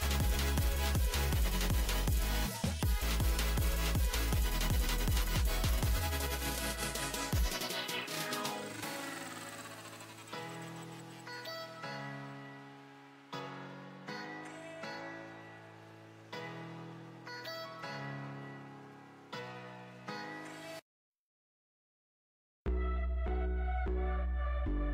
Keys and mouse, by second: 0.8 c, 3.3 z, 3.9 z, 7.1 c, 9.0-11.0 drag, 10.6 z, 11.0 Tab, 11.6 Tab, 13.3 shift+d, 15.0 p, 15.7 Tab, 16.0 z, 16.4 click, 17.1-18.3 drag, 18.0 Tab, 18.3 a, 18.4 a, 18.7 a, 19.5 alt+s, 23.6 KP_Divide, 24.1 z.